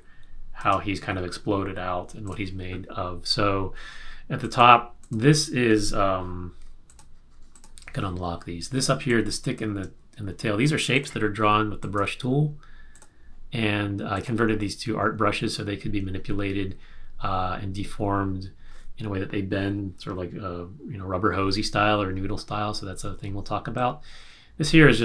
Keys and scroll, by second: 8.7 z.